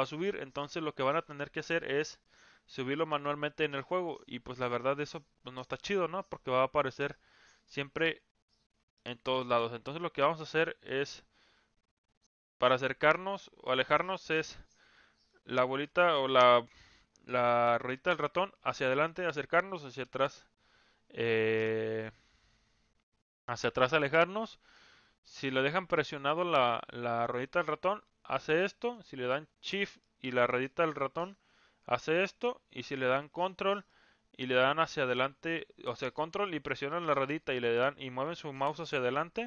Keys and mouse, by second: 2.2-4.2 drag, 6.1 click, 6.4-8.0 drag, 9.0-9.3 shift+middle drag, 24.8-29.0 middle drag, 30.2-32.4 shift+middle drag, 33.9-39.4 ctrl+middle drag.